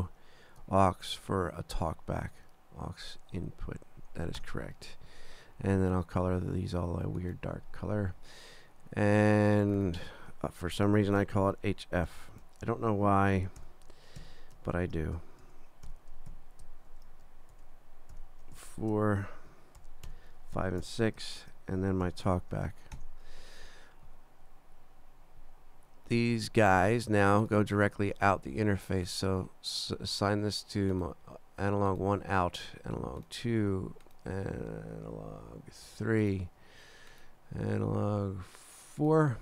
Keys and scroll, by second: 1.0 super+Down, 4.4 Return, 10.7-12.1 typing, 12.7 super+Down, 13.3 shift+super+h, 13.6 shift+f, 14.2 shift+2, 14.8 super+Down, 15.4 shift+super+h, 15.9 shift+f, 16.3 shift+3, 16.9 super+Down, 17.5 shift+super+h, 18.1 shift+f, 18.6 shift+4, 19.2 super+Down, 19.8 shift+super+h, 20.1 shift+f, 20.6 shift+5, 20.8 6, 21.4 super+Down, 22.0 shift+super+t, 22.3 shift+b, 23.0 shift+Return.